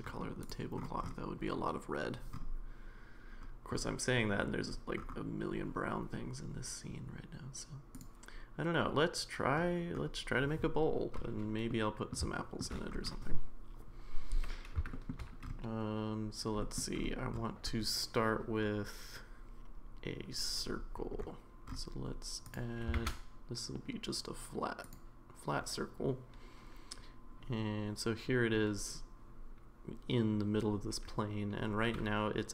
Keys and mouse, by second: 0.4 click, 8.0 click, 11.7-12.1 middle drag, 12.4 shift+middle drag, 14.9 shift+middle drag, 16.6 middle drag, 22.5 click, 22.9 shift+a.